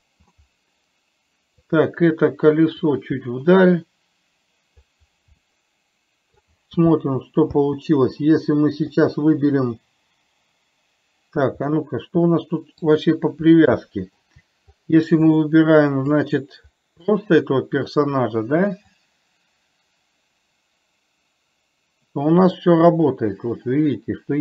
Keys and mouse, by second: 2.0 click, 3.2-5.2 drag, 5.7-6.7 middle drag, 7.2 space, 9.2 click, 12.1-13.2 middle drag, 14.2-14.6 shift+middle drag, 17.5 middle click, 19.5-24.4 drag.